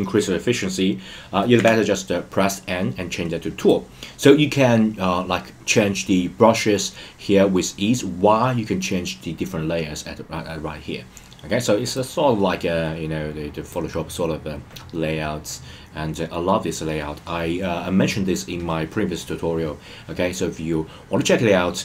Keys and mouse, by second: 1.6 n, 12.1-13.9 drag.